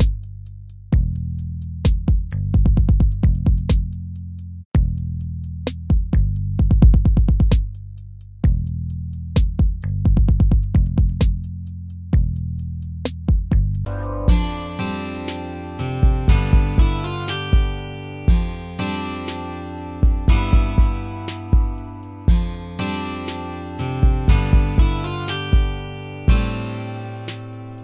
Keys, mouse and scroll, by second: 1.7 ctrl+-, 2.7 ctrl+-.